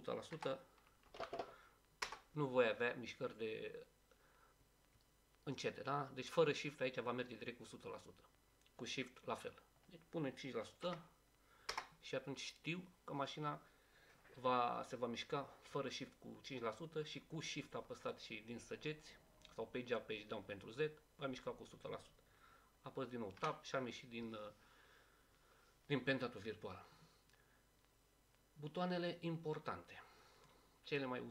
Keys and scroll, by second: 0.3-1.2 typing, 2.8 Return, 10.8 5, 13.5 Return, 23.4 Tab.